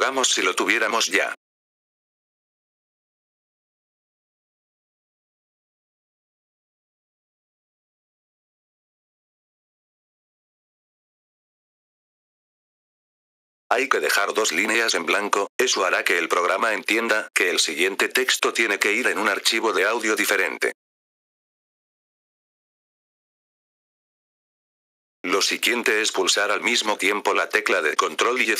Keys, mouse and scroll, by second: 0.1 Return, 1.9-2.8 typing, 4.7-5.5 typing, 7.0-8.2 typing, 9.4 F4, 10.5-12.3 drag, 13.2 F4, 13.6 click, 14.5 click, 19.1-24.0 drag, 24.6 F4, 25.1-26.9 drag.